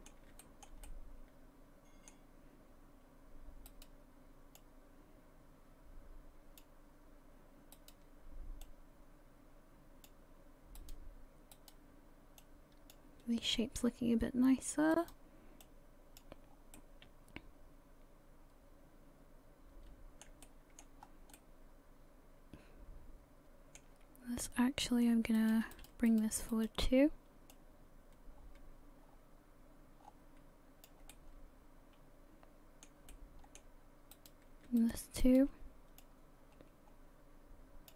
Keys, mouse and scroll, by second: 0.4 shift+middle click, 0.9 middle click, 3.7 right click, 4.6 click, 7.8 right click, 8.6 click, 10.8 right click, 11.5 right click, 12.4 click, 14.9 right click, 15.6 click, 16.5 scroll down 3, 16.7 middle click, 20.4 shift+middle click, 21.0 scroll up 3, 21.3 middle click, 24.1-24.6 scroll down 2, 24.6 middle click, 25.4 right click, 25.7 shift+right click, 26.1 shift+right click, 26.5 shift+right click, 27.5 click, 31.1 middle click, 33.1 middle click, 34.1 right click, 34.8 shift+right click, 35.2 shift+right click, 36.0 click.